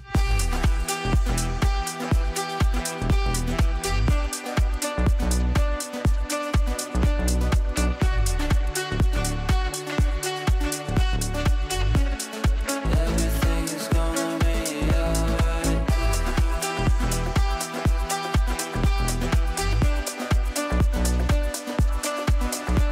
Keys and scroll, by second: 0.6 c, 6.0 t, 8.1 Down, 18.1 c.